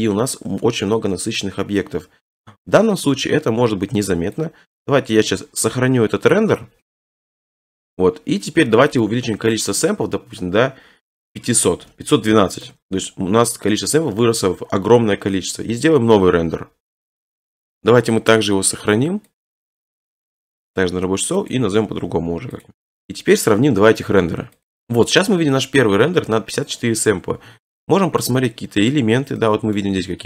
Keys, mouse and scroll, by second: 3.2 click, 5.1 click, 5.4 scroll down 4, 6.9 click, 6.9 scroll, 7.0 click, 7.3 click, 7.5 click, 7.9 click, 9.0 click, 11.1 click, 11.3-11.9 typing, 17.0 middle click, 17.7 right click, 19.4 click, 21.5 click, 21.8 typing, 22.6 click, 22.8 click, 22.9 click, 25.8 middle click, 25.8-26.8 scroll, 28.2 click, 28.6-29.0 scroll, 29.8 middle click, 30.0 middle click, 30.0 scroll.